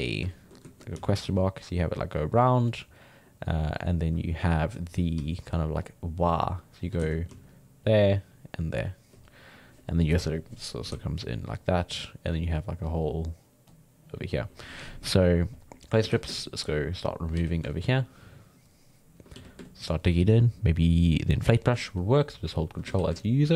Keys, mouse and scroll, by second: 0.1 ctrl+middle click, 0.9 d, 1.2-2.7 drag, 2.7-3.2 d, 5.2 d, 5.7 d, 5.8-6.8 drag, 6.8-9.1 typing, 7.0 ctrl+z, 7.5 click, 8.3 click, 10.7 d, 10.9 d, 11.0 click, 11.8-12.4 d, 12.5-13.5 drag, 13.5 d, 13.7 click, 14.4 d, 15.9 d, 16.0 f, 16.4 ctrl+click, 17.4 f, 17.7-19.3 ctrl+drag, 19.3 f, 19.7-22.9 ctrl+drag, 22.9 f, 23.2-23.5 ctrl+drag.